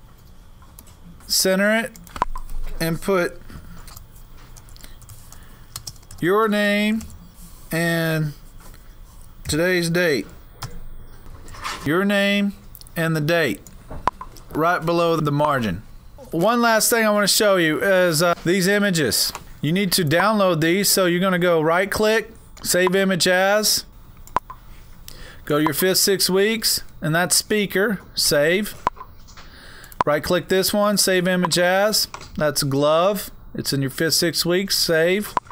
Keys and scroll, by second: 3.9-7.6 typing, 9.6-11.7 typing.